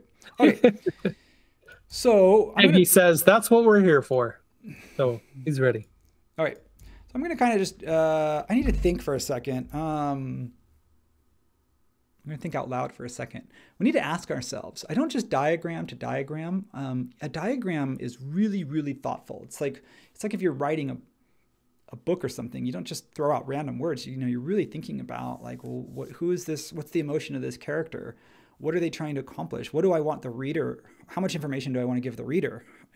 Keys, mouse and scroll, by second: 9.7 super+s.